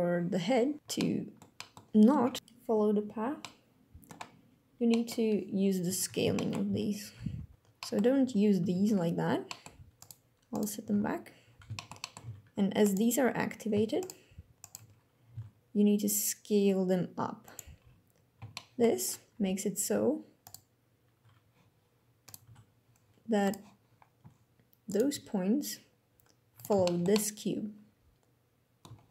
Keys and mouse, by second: 3.1-3.8 drag, 4.6 click, 6.0 shift+middle drag, 6.4 alt+a, 6.7 c, 7.5 click, 8.3 alt+g, 8.4 alt+r, 9.1 click, 9.6 click, 10.2 click, 10.6 alt+g, 10.6 alt+r, 11.4 shift+drag, 11.6 drag, 11.9 alt+a, 12.5 click, 13.7 shift+click, 14.3 shift+click, 17.1 click, 17.1 s, 18.2-18.6 shift+middle drag, 20.1 click, 21.9 click, 22.1 g, 23.1 click, 24.6 click, 24.8 g, 26.2 click, 26.6-28.6 shift+drag, 28.5 g.